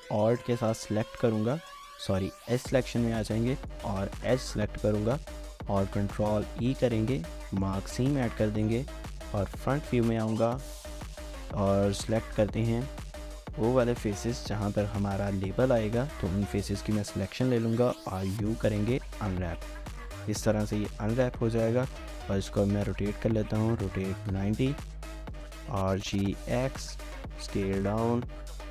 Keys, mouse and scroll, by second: 0.3 alt+click, 2.4 2, 3.6 alt+click, 5.8 ctrl+e, 8.0-8.5 scroll down 2, 8.5 shift+middle click, 10.1-10.9 typing, 12.2 typing, 12.6 alt+click, 13.0 shift+middle click, 18.0 typing, 19.6 scroll down 1, 20.3-23.2 typing, 24.2 Return, 25.1-25.9 typing, 27.4 typing.